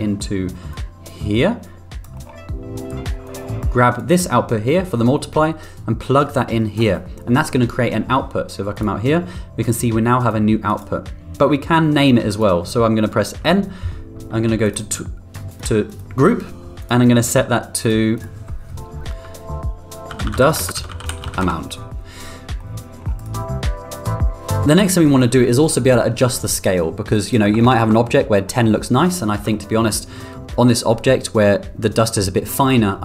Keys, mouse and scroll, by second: 0.7-2.0 drag, 2.1 middle drag, 3.2 click, 4.0-6.7 drag, 4.0 n, 8.7 click, 10.2 click, 12.3 click, 13.0 middle drag, 13.3 n, 15.4 click, 15.8 click, 16.7 click, 17.8 click, 18.1-22.1 drag, 22.5 middle click, 23.1 click, 27.1 click, 29.5 middle drag.